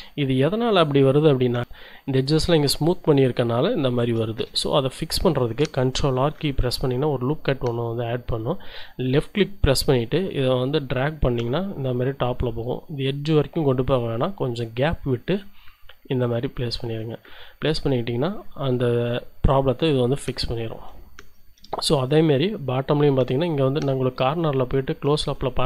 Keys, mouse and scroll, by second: 4.5 shift+z, 4.7 shift+middle click, 6.2 ctrl+r, 6.6 ctrl+click, 16.2 click, 16.7 z, 17.7 Tab, 20.1 shift+click, 21.2 shift+Tab, 21.7 shift+click, 23.7-24.1 scroll up 2, 24.3 shift+click, 25.5-25.6 shift+drag.